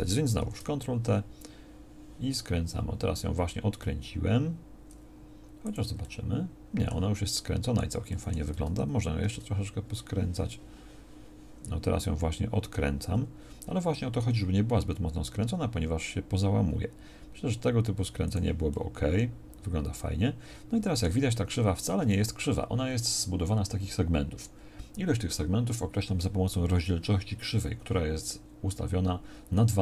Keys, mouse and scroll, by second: 9.2 ctrl+t.